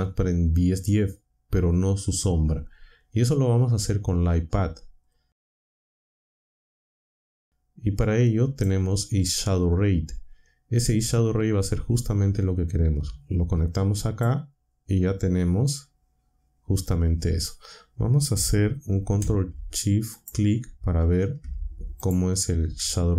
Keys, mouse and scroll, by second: 5.0-5.8 drag, 7.4-8.8 drag, 11.9-14.3 drag, 20.1 ctrl+shift+click, 22.0 ctrl+shift+click.